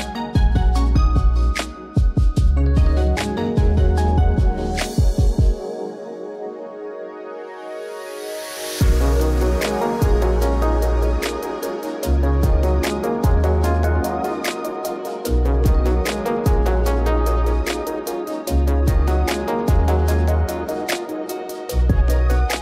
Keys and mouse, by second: 1.8 alt+shift+z, 2.0 alt+shift+z, 3.2 ctrl+shift+click, 4.8 click, 6.4-7.5 drag, 7.7 click, 9.5 click, 10.8 middle click, 11.8 ctrl+shift+click, 12.7 ctrl+s, 13.8 alt+shift+z, 14.2 alt+shift+z, 16.2 click, 17.2 click, 21.2 click, 22.4 click.